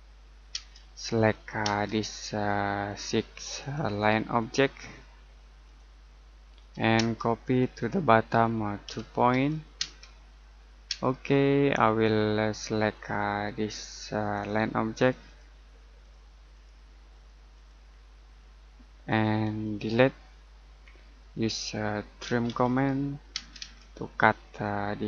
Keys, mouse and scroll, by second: 1.1-1.6 scroll up 1, 1.6 space, 1.9 click, 6.9 space, 7.4 click, 8.8 2, 9.7 space, 11.8-12.9 scroll up 1, 12.9 click, 18.1 middle click, 19.0 click, 20.6 Delete, 22.0-23.3 typing, 24.0 scroll down 1, 24.4 middle click.